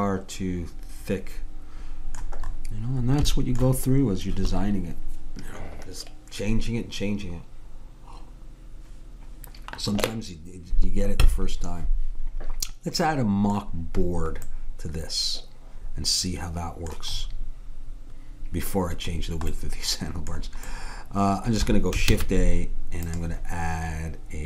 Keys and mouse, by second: 5.1-6.8 middle drag, 13.1-14.6 middle drag, 22.1 shift+a.